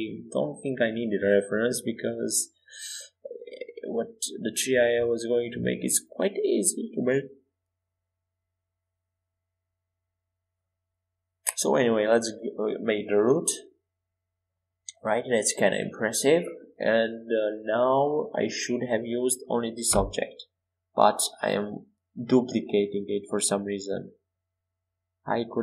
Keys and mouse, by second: 3.0 KP_1, 6.2 Tab, 8.8 f, 10.2 e, 12.1 e, 14.2 KP_7, 17.6 KP_1, 18.6 Tab, 20.2 shift+d.